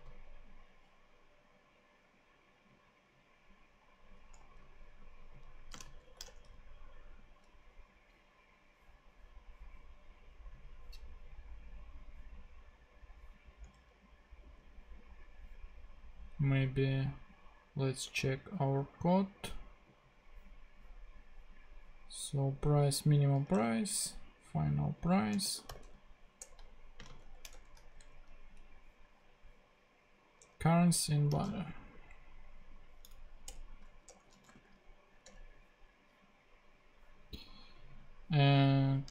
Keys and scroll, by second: 4.4 super+z, 5.7 space, 6.0 shift+[, 6.3 shift+Return, 7.3 Return, 13.7 super+Tab, 23.5 super+Tab, 25.2-27.2 typing, 26.4 Return, 27.5 shift+Return, 28.0 super+Tab, 30.4 super+Tab, 31.3 super+c, 31.4 a, 33.1 Down, 33.4 Return, 34.1-35.0 typing, 35.2 Return.